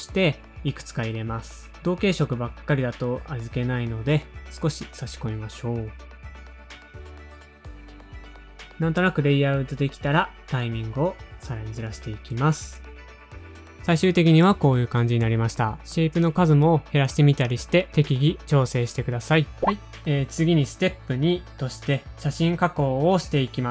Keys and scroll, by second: 0.2 Return, 2.3 F2, 2.6 F2, 4.8 Return, 6.3 F2, 6.4 F2, 6.7 F2, 6.9 super+Down, 7.0 F2, 8.5 Return, 8.9 super+a, 9.1 space, 9.4 alt+Page_Down, 9.5 alt+Page_Down, 9.5 super+Down, 9.9 super+Down, 10.0 alt+Page_Down, 10.1 alt+Page_Down, 10.2 super+Down, 10.3 super+Down, 10.5 alt+Page_Down, 10.6 alt+Page_Down, 10.8 super+Down, 10.9 super+Down, 11.1 alt+Page_Down, 11.2 alt+Page_Down, 11.3 super+Down, 11.5 super+Down, 11.6 alt+Page_Down, 11.7 alt+Page_Down, 11.8 super+Down, 11.8 typing, 12.3 super+Up, 12.3 super+Up, 12.4 super+Up, 12.4 super+Down, 12.8 super+Up, 13.2-14.2 typing, 13.4 super+Down, 13.5 super+Down, 15.5 space, 15.6 super+Down, 16.8 space, 17.0 super+Down, 18.2 space, 18.4 shift+Page_Up.